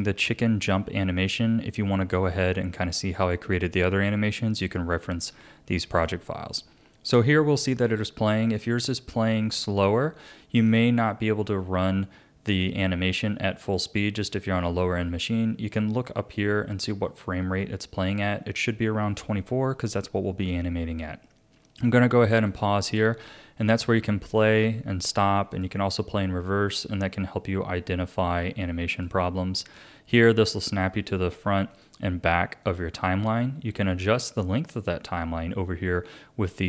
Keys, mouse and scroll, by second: 22.4-28.6 drag, 28.9-35.9 drag.